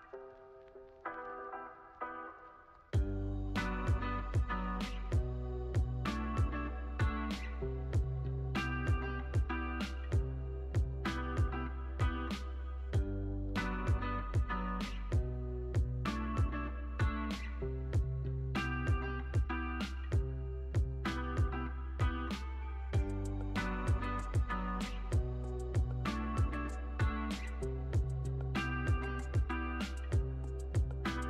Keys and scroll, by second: 6.5 super+s, 10.0 super+s, 10.3 space, 14.3 space, 14.6 super+s, 24.9 u.